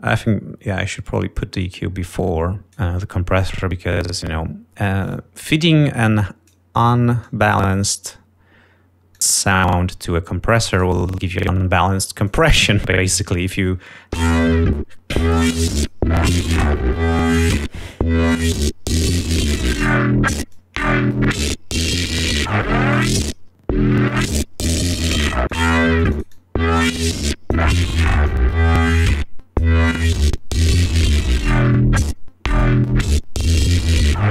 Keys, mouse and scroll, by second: 3.9 click, 5.9 click, 7.2 click, 8.3 click, 10.2 click, 11.7 click, 13.0 click, 14.8 l, 16.4 click, 19.6 click, 21.1 click, 21.6 scroll down 2, 21.9-23.9 drag, 25.6 click, 26.3-28.3 drag, 28.4-29.9 drag, 30.3 click, 33.0 click.